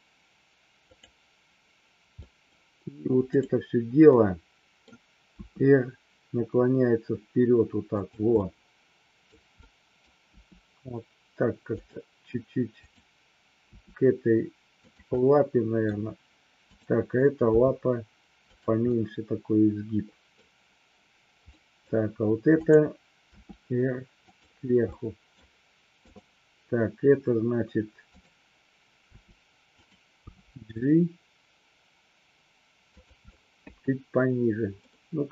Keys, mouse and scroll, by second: 0.9 click, 2.1 middle drag, 4.0-4.8 middle drag, 5.3 r, 8.3-9.3 middle drag, 9.5 middle click, 10.3 r, 11.6 click, 13.6 r, 14.8 click, 15.0-15.8 middle drag, 15.8-16.5 scroll down 1, 16.6 click, 17.4 g, 18.4 click, 18.8 scroll up 1, 18.9-20.3 middle drag, 21.4 scroll up 1, 21.6 middle click, 21.8 scroll down 1, 23.3 r, 24.3 drag, 24.8-25.4 middle drag, 25.9 click, 28.1 click, 29.0 r, 29.8 click, 30.1 g, 33.3 scroll up 1, 33.4-34.8 middle drag, 34.9-35.3 middle drag.